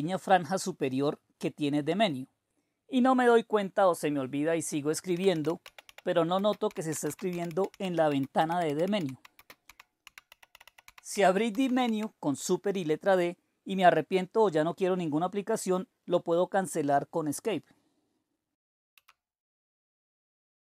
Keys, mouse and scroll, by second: 4.8-12.3 typing, 18.9 Escape.